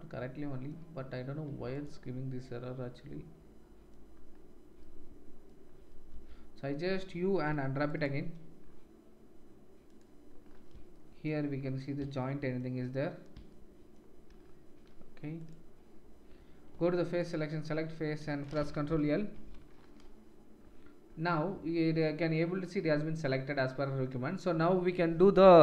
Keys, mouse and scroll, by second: 1.7 middle click, 1.7 right click, 9.8 middle click, 9.8 right click, 15.4-17.3 middle drag, 17.3-25.6 drag.